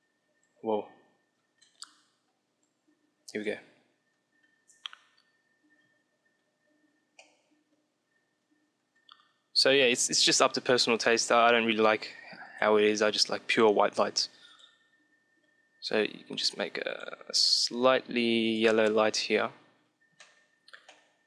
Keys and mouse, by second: 2.4-4.2 drag, 6.7-9.7 middle drag, 9.7-11.6 drag, 19.5-21.2 middle drag.